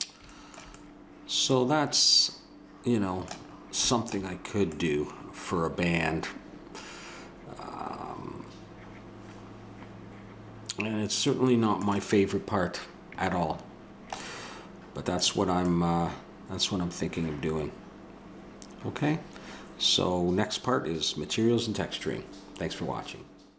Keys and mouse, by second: 5.0-6.6 middle drag.